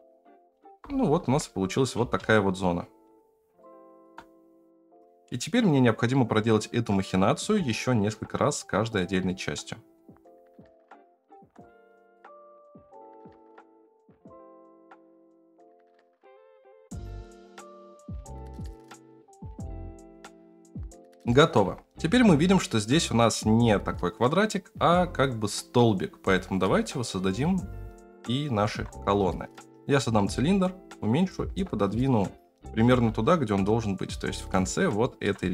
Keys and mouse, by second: 0.6 alt+z, 1.2 Tab, 2.0 space, 3.6-4.1 shift+middle drag, 7.4 space, 9.2-10.0 middle drag, 10.2-11.3 shift+middle drag, 11.6-12.1 middle drag, 12.4 g, 12.6 KP_0, 12.8 ctrl+z, 12.9 shift+middle click, 13.2 shift+middle click, 13.5 Tab, 13.9 middle click, 14.1 Tab, 14.4 click, 14.7 ctrl+z, 14.8 Tab, 15.0 right click, 15.0 3, 15.6 i, 15.6 s, 15.8 3, 15.8 middle click, 16.1 ctrl+z, 16.2 ctrl+z, 16.4 right click, 16.8 middle click, 17.0 right click, 17.2 middle click, 17.5 shift+2, 17.9 shift+middle click, 18.2 KP_0, 18.5 alt+z, 18.6 g, 18.9 alt+z, 19.3 shift+middle click, 19.7 shift+middle click, 21.6 Tab, 28.6 shift+a, 29.6 s, 30.2 s, 31.2 g, 32.5 KP_7, 32.6 g, 35.0 shift+middle click, 35.4 g.